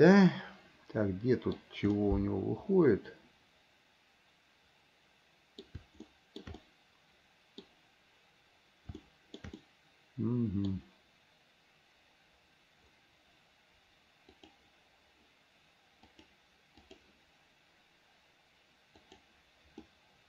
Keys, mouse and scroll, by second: 2.2-5.9 middle drag, 6.3 shift+middle click, 6.8-7.9 middle drag, 9.2 shift+middle click, 9.8-10.9 middle drag, 14.6 click, 16.4 click, 19.2 click, 20.1 middle click.